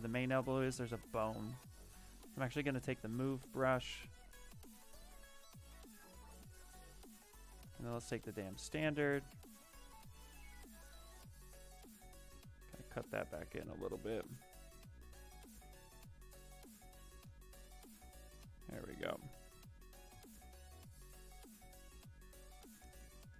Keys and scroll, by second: 1.9-3.0 typing, 6.5-8.3 typing, 19.6-20.5 typing.